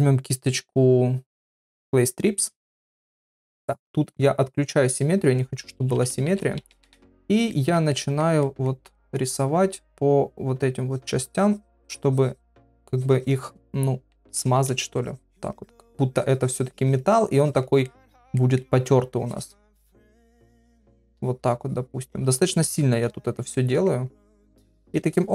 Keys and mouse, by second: 2.7 shift+middle click, 5.7-6.4 typing, 7.5 ctrl+middle click, 7.9 middle click, 8.4 middle click, 9.0 middle click, 10.9-12.7 drag, 12.9 click, 13.2 click, 14.1 ], 14.3 ], 14.7 click, 15.7 click, 16.1 click, 16.8 click, 17.3 click, 17.9 middle click, 18.4 middle click, 19.2 click, 20.3-22.1 drag, 22.2 click, 23.2 ctrl+middle click, 23.5 middle click, 24.3 middle click, 25.1 shift+middle click.